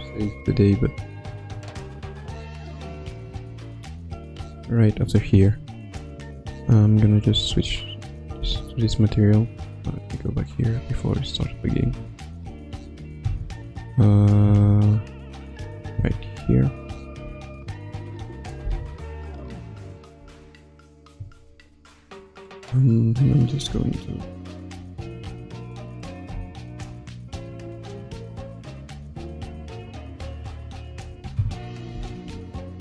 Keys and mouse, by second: 1.8-4.7 drag, 8.4 Left, 11.8 Left, 12.4 Right, 12.8 Right, 13.2 Left, 14.1 Right, 14.4 Left, 15.6 Right, 16.0 Left, 16.4 Right, 17.2 i, 18.6 Left, 20.2 Right, 24.2-25.6 shift+drag, 25.9 ctrl+z, 27.1-30.9 shift+drag, 31.9 Left, 32.2 Right.